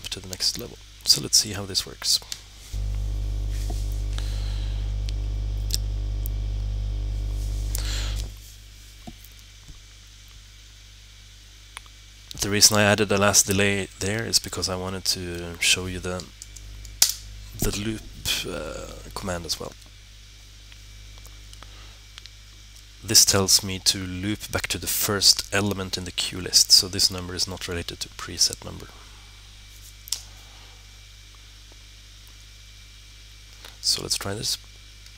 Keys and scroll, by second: 16.3 l, 19.6 1.